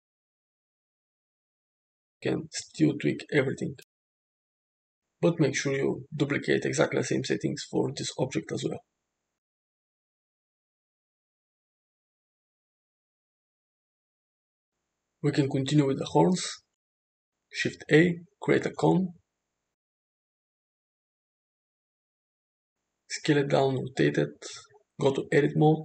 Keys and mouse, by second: 1.2 h, 2.0 click, 3.6 click, 5.6 alt+h, 6.4 click, 7.7 click, 9.3-10.6 ctrl+drag, 11.0 click, 12.1 middle drag, 13.0-13.5 shift+middle drag, 16.3 shift+a, 19.2 g, 20.5 s, 22.9 g, 24.0 r, 25.0 Tab, 25.6 shift+middle drag.